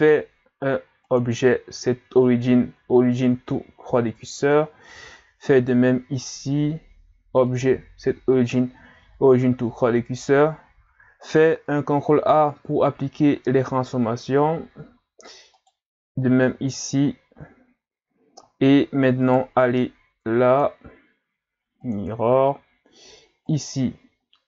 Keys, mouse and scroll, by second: 1.0 click, 5.5 right click, 7.5 click, 11.9 ctrl+a, 15.6 right click, 16.5 ctrl+a, 18.6-19.3 scroll up 1, 19.3 right click, 20.5 click, 23.5 right click.